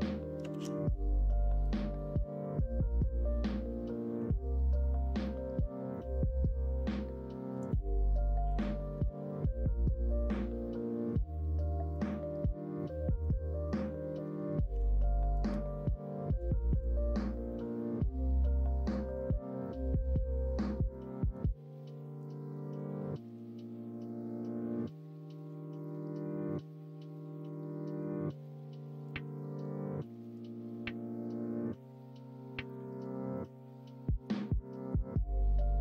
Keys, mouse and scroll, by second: 0.5 ctrl+b, 9.0-11.9 middle drag, 12.4-13.2 middle drag, 13.5 middle click, 14.7 l, 15.4 m, 20.3 middle click, 20.9 middle click, 22.0 shift+middle click, 24.7 middle click, 25.1 shift+middle click, 25.7-27.4 middle drag, 27.8 middle click, 28.2 middle click, 29.5 shift+middle click.